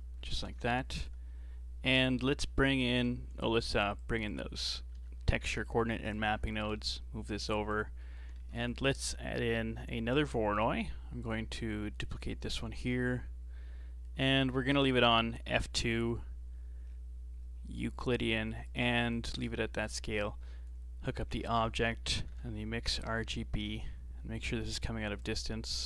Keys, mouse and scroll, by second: 0.2-0.5 scroll down 3, 0.5 shift+a, 4.3 click, 5.0 ctrl+t, 5.2-5.5 scroll up 4, 5.5 middle click, 6.2 click, 7.2 g, 8.0 middle click, 8.4 shift+a, 12.0 right click, 12.5 shift+d, 16.9-17.7 scroll up 7, 17.7 middle click, 18.7-19.9 drag, 21.3 shift+a, 25.3 click.